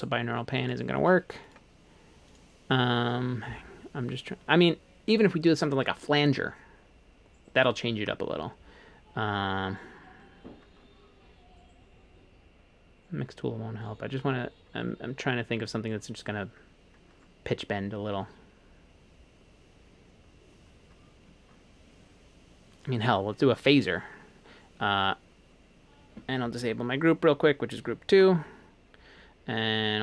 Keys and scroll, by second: 28.2 alt+2.